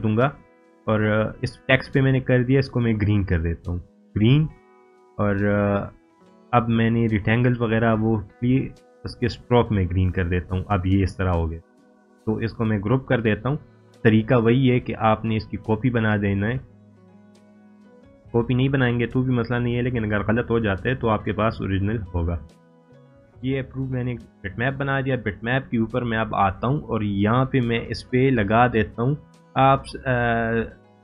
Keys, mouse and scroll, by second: 8.8 right click, 9.9-11.8 drag, 16.4 right click, 18.1 click, 23.0-23.9 drag.